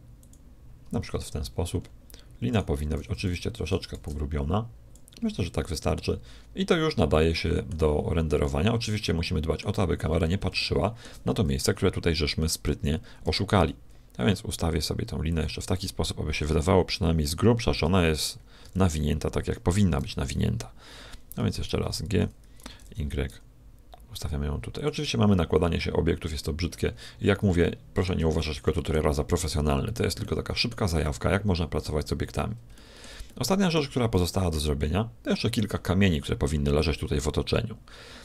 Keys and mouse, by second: 1.7-4.3 middle drag, 2.9 s, 5.2-7.5 middle drag, 8.3-9.6 middle drag, 9.7 middle click, 10.5 middle click, 12.1 middle click, 13.2 g, 18.5 t, 19.9 t, 22.6 g, 26.6 middle click, 27.4-38.2 middle drag.